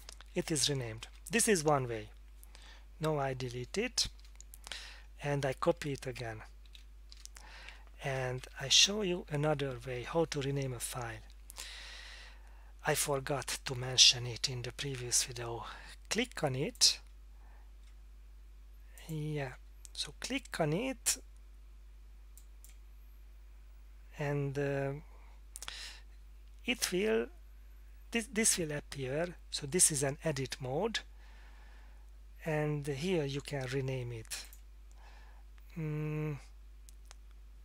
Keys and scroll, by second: 1.4 Down, 3.6 F8, 4.2 Return, 4.9 Tab, 6.6 F5, 7.1 Return, 7.7 Tab, 8.4 Down.